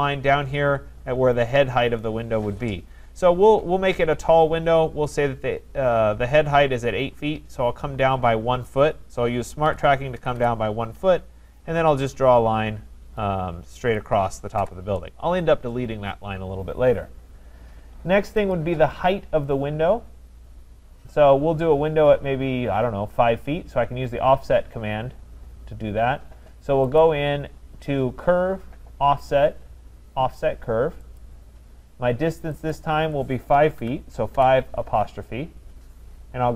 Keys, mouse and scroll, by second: 9.7-10.4 typing, 13.9 click, 14.6 Return, 18.5 click, 27.0 click, 31.2 click, 32.7 click, 33.8-34.3 typing.